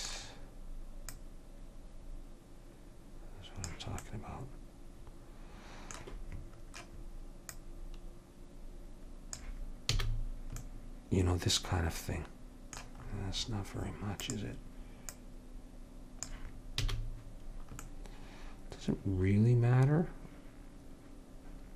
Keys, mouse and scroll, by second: 1.2-3.3 drag, 3.1 right click, 4.2 middle click, 7.6-9.5 drag, 10.1 a, 14.4-17.0 drag, 17.0 a.